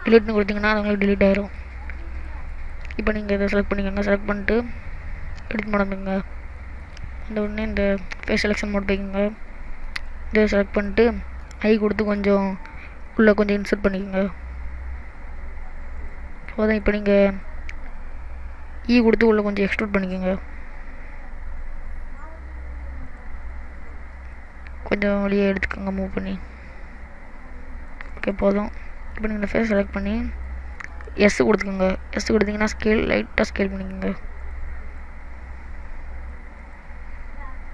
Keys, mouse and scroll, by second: 1.3 middle click, 2.2 click, 2.6 middle click, 3.1-4.0 scroll up 2, 4.0 middle click, 5.6 click, 6.6 middle click, 8.6 click, 9.0 middle click, 9.4 scroll up 2, 10.0 click, 10.6 middle click, 12.2 i, 16.5 middle click, 19.7 e, 23.5 middle click, 25.7-30.1 click, 30.1 middle click, 31.5 s, 35.0 middle click, 36.6 click, 37.5 middle click.